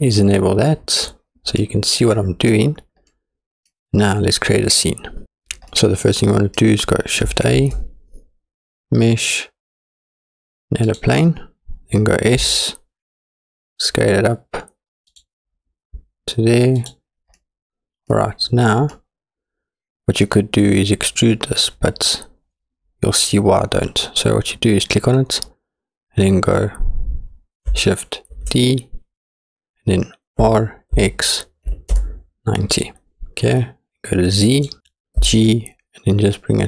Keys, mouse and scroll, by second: 0.4 click, 1.6-2.5 middle drag, 3.1-3.7 middle drag, 5.7 scroll up 1, 5.8 middle click, 7.6 shift+a, 12.5 s, 16.8-17.4 drag, 17.4-18.2 middle drag, 18.2 scroll down 2, 18.9-19.6 middle drag, 19.8 middle click, 24.8 click, 28.4 shift+d, 34.6 click, 35.2 g.